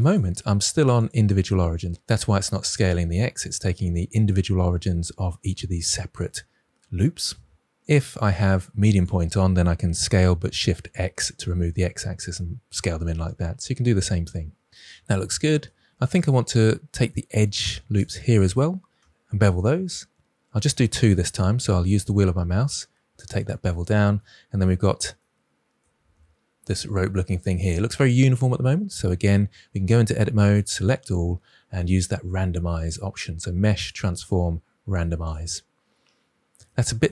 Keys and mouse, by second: 0.9-3.4 drag, 7.9-9.0 drag, 9.9 s, 10.6 shift+x, 14.7 middle click, 16.1 alt+click, 19.1 ctrl+b, 23.3-23.8 drag, 24.1 middle click, 26.1 Tab, 29.8 Tab, 30.6 a, 32.9-35.3 drag.